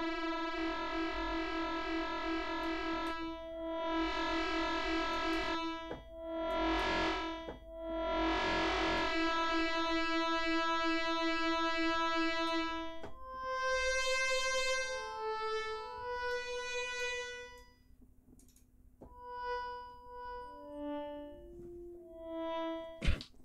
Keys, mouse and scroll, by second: 0.6 scroll up 2, 2.6 click, 5.1 click, 6.5 click, 8.9-12.6 drag, 16.3 click, 17.5 click, 23.2 g.